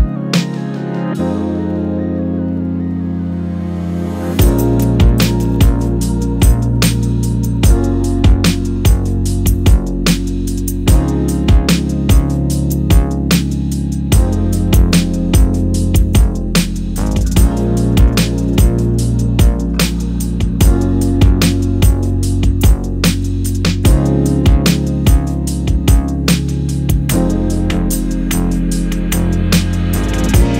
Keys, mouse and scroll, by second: 1.4 KP_7, 2.1 click, 2.8 Tab, 3.0 click, 3.2-5.1 middle drag, 3.8 KP_7, 4.9 Tab, 5.1 click, 6.2 s, 7.9 click, 8.1-11.0 middle drag, 8.4-8.8 scroll up 2, 8.8 z, 9.1 scroll up 2, 10.5 KP_0, 11.1 click, 11.7-12.1 drag, 12.7-13.6 drag, 14.3 click, 15.9 click, 17.4 g, 18.3 click, 18.5-26.9 middle drag, 19.4-19.8 scroll up 1, 22.5-23.7 scroll up 2, 23.7-24.6 scroll up 1, 24.6-25.7 scroll down 2, 26.9 click, 27.7 Tab, 28.1 click, 29.9 3, 30.2 click.